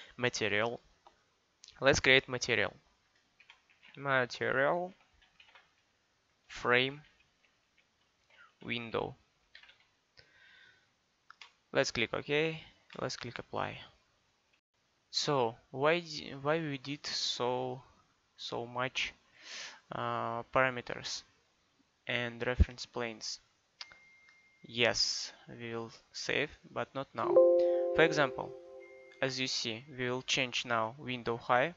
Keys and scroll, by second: 3.5-5.4 typing, 6.9-9.7 typing.